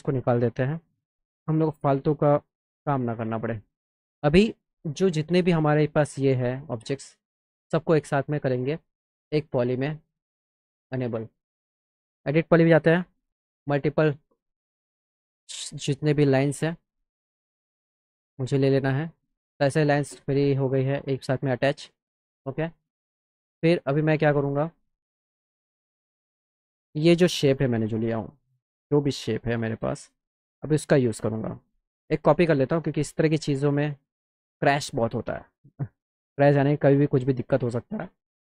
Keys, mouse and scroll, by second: 1.4 click, 6.3 click, 7.9 click, 9.8 click, 12.0 click, 13.6 click, 14.0 click, 18.1 click, 20.9 click, 22.6 click, 23.0 click, 24.2 click, 26.0 click, 26.8 click, 27.4 click, 27.7 click, 28.2 click, 28.9 click, 29.3 click, 29.8 click, 30.0 click, 30.7 middle click, 31.2 middle click, 31.8 click, 32.3 middle click, 33.5-34.7 shift+drag, 35.6 click, 36.6 shift+click.